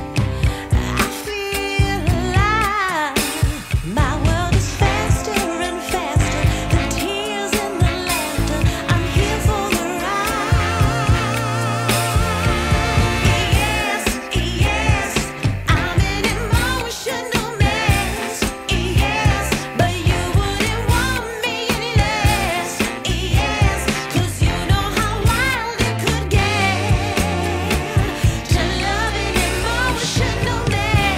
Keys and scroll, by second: 0.2 alt+q, 1.6 z, 1.9 F3, 17.6 F3, 19.2 F4, 20.2 F4, 23.5 F3, 26.2 F3, 27.4 F4, 28.5 ctrl+t, 29.1 F4, 29.6 2, 30.3 ctrl+c.